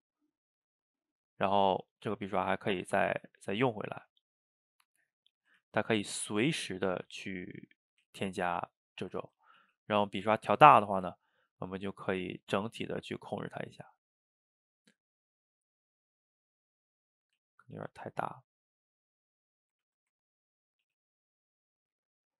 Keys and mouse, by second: 0.5 click, 1.0-2.3 middle drag, 2.3 f, 3.1-4.7 drag, 4.7-5.7 middle drag, 5.7 ctrl+z, 6.0-7.4 drag, 7.4 middle click, 8.0 ctrl+z, 8.4 click, 9.2 ctrl+z, 9.6 f, 10.9-12.4 ctrl+shift+middle drag, 12.4-15.5 drag, 16.2-17.4 middle drag, 17.4 ctrl+z, 17.8 f, 18.7 click, 19.6 middle click, 19.9 ctrl+z, 20.2 ctrl+middle click, 20.9 f, 21.6 middle click, 22.0-22.3 drag.